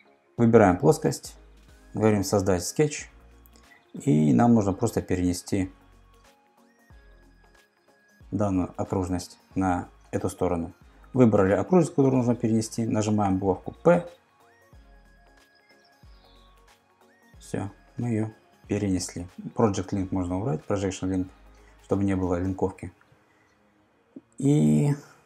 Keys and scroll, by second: 13.5 p, 24.5 super+Tab.